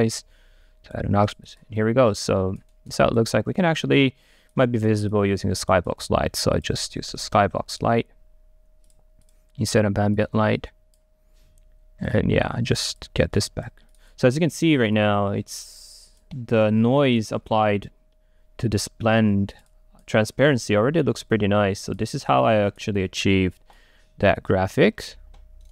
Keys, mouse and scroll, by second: 3.7 click, 3.7 right click, 4.6-5.7 drag, 6.0 click, 6.3 right click, 6.8-7.9 drag, 7.9 Return.